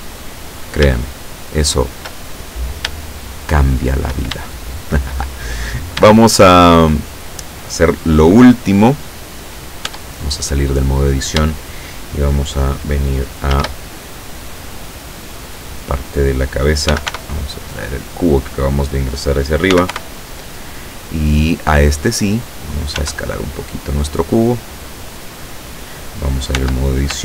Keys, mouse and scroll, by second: 0.4-0.8 scroll down 2, 1.2-2.2 shift+middle drag, 2.4 shift+scroll down 1, 3.2-4.2 shift+middle drag, 4.4 shift+middle click, 5.5-6.2 shift+scroll up 2, 6.2 shift+middle click, 8.5 scroll down 2, 9.5 scroll up 2, 9.9 Tab, 10.3-10.9 scroll up 2, 13.6 shift+a, 15.6 click, 17.0 g, 17.2 y, 18.0 click, 19.8 g, 20.0 y, 22.2 click, 23.0 s, 24.3 click, 25.2 click, 26.6 Tab.